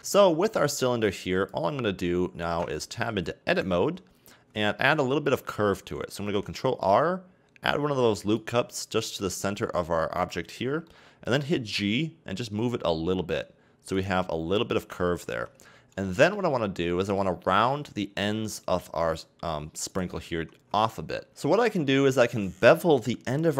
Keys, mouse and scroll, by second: 3.5 right click, 3.8 Tab, 4.8-6.4 scroll down 1, 6.4 ctrl+r, 10.9 middle click, 11.6 g, 14.9 a, 15.3 Tab, 16.0-16.5 shift+middle drag, 16.5-16.9 scroll up 2, 16.9-17.8 middle drag, 17.8-19.3 scroll up 1, 19.9 right click, 20.3 Tab.